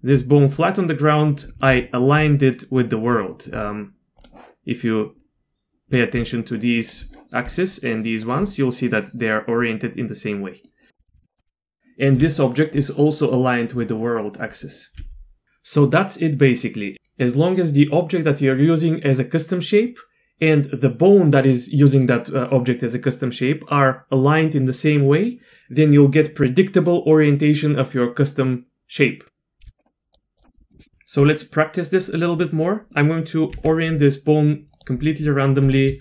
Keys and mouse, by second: 1.5 click, 1.8 shift+drag, 2.3 drag, 3.4 shift+click, 6.2-8.3 typing, 6.3 click, 7.7 click, 9.6-10.7 drag, 9.6-11.0 d, 11.0 click, 11.2 ctrl+z, 11.2 click, 11.2 d, 11.3 d, 11.8 d, 29.6 q, 30.1 click, 30.4 click, 30.5 middle drag, 30.6 middle click, 30.8 middle click, 31.3 middle click, 32.4 middle click, 32.9 middle click, 33.5 g, 35.3 middle click, 35.6 click.